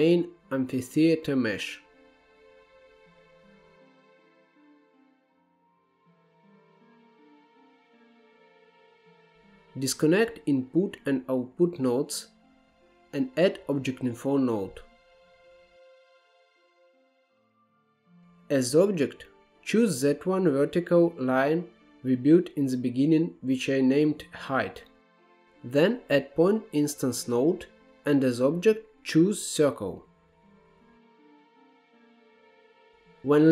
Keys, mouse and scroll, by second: 3.9 Left, 6.7-8.6 drag, 8.9-9.3 drag, 9.9-10.9 scroll up 10, 10.9-12.8 middle drag, 12.8 click, 13.2 x, 13.7 click, 14.9 shift+a, 17.6-18.2 scroll up 1, 18.2 click, 25.0 shift+a, 30.0-32.0 drag, 32.3-33.5 drag.